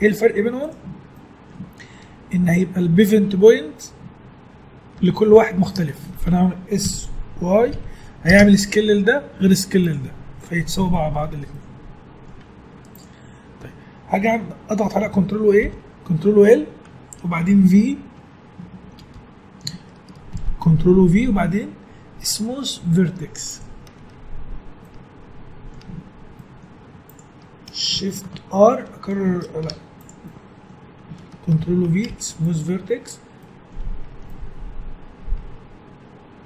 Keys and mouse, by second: 1.3-3.9 middle drag, 5.4-7.3 middle drag, 6.8 s, 11.2 Tab, 12.7 Tab, 15.6 ctrl+l, 19.0 v, 20.3 ctrl+v, 24.8-28.8 middle drag, 25.9 Tab, 26.8 Tab, 28.8 shift+r, 29.6 Tab, 30.6-31.6 middle drag, 31.6 ctrl+v, 33.5-34.5 middle drag, 33.8 Tab, 35.1-36.1 middle drag.